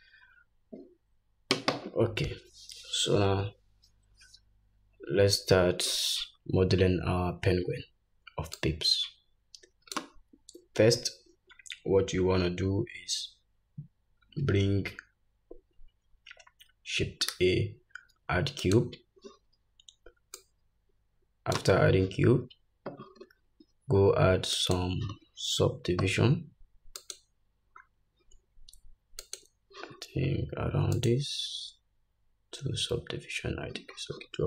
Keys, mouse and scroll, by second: 8.5-24.7 drag, 17.3 shift+a, 27.0-34.4 drag.